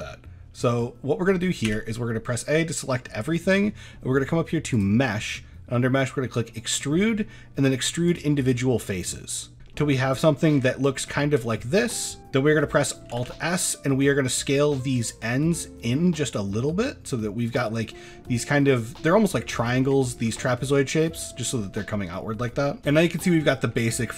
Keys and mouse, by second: 1.7 a, 2.1 middle drag, 2.9 middle drag, 3.3 shift+middle click, 4.8-8.3 drag, 9.7 middle click, 10.3 shift+middle click, 11.1 shift+middle drag, 12.2 alt+s, 12.2 ctrl+z, 13.2 alt+s, 17.5 click, 17.8-18.4 middle drag, 19.4 middle drag, 20.0 middle click, 20.3 shift+middle click, 20.6-21.1 middle drag, 22.5 middle drag, 22.9-23.2 middle drag, 23.4 shift+middle click, 23.8 middle drag.